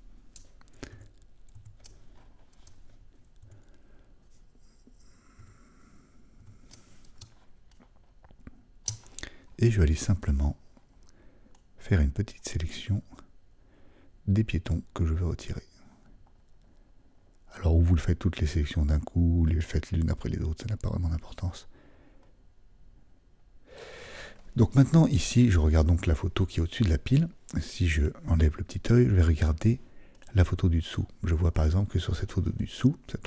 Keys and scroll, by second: 1.5 super++, 5.4 typing, 6.6 typing, 11.1 typing.